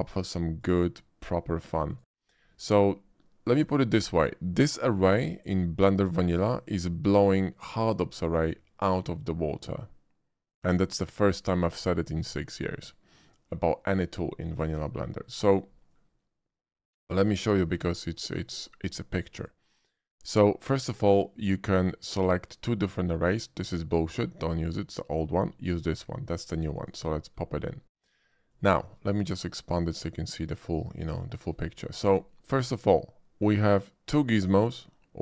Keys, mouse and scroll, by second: 0.5 shift+click, 1.9 shift+click, 3.4 click, 13.6-14.2 middle drag, 14.8 shift+middle click, 15.1 shift+middle click, 15.7 shift+middle click, 17.4 shift+middle click, 18.4 shift+click, 19.3 shift+click, 26.7 click, 27.9-28.4 middle drag, 28.7 shift+middle click, 29.7 shift+click, 31.3 shift+middle click, 31.9 shift+middle click, 32.2 shift+middle click.